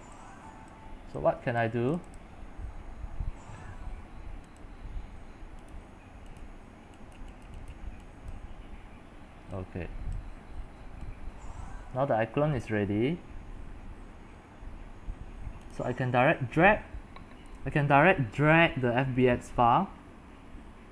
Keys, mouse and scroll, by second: 3.7-4.1 scroll down 4, 4.1-4.7 scroll up 4, 4.7-5.1 drag, 5.1 scroll down 3, 5.2-5.8 scroll up 4, 5.8-20.9 drag.